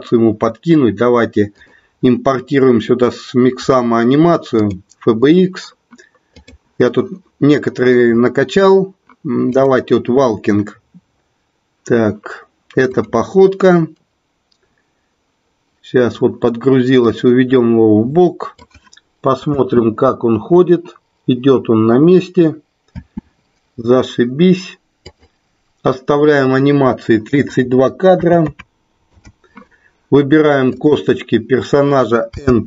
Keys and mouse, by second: 1.5-5.0 drag, 17.4-18.9 drag, 19.5 space, 23.7 space, 25.4 click, 27.3-29.2 drag, 30.6 click, 32.2 n.